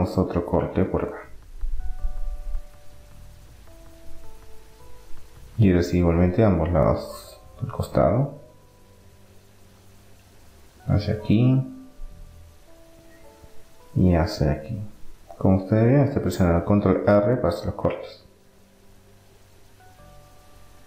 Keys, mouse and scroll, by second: 0.6 ctrl+r, 5.9-9.5 middle drag, 7.9 ctrl+r, 12.5-14.9 middle drag, 13.9 ctrl+r, 19.9-20.8 middle drag.